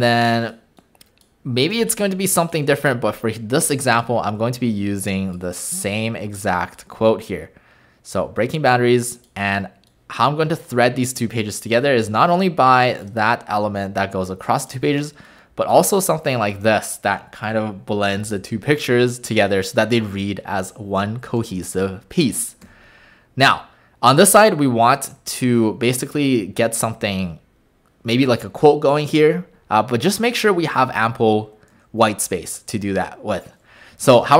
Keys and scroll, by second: 1.7 BackSpace, 2.7 BackSpace, 17.5 w, 22.6 w.